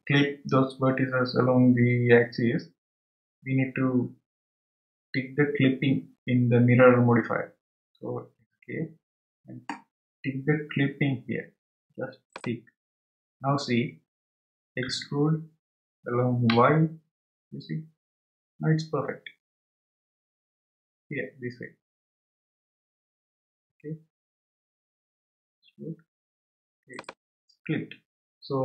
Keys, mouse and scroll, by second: 12.3 click, 15.8 e.